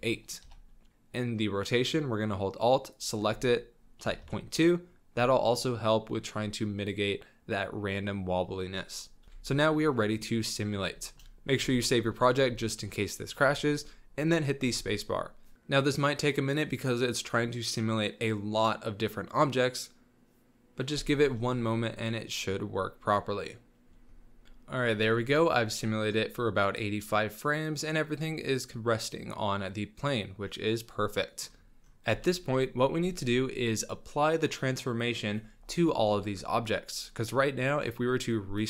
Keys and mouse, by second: 2.9-4.2 alt+drag, 9.2 z, 9.6 shift+middle drag, 9.9-10.7 middle drag, 11.0 shift+middle click, 11.6 ctrl+s, 12.6 middle drag, 13.0 middle click, 13.4 shift+middle click, 13.5 shift+drag, 14.7 space, 16.9 s, 24.5 space, 25.1 drag, 25.5 click, 25.7 click, 25.9 click, 27.0-27.4 drag, 27.5 s, 27.7-30.2 drag, 30.2-30.7 middle drag, 30.5 click, 30.7-31.4 drag, 32.0 z, 38.5 click.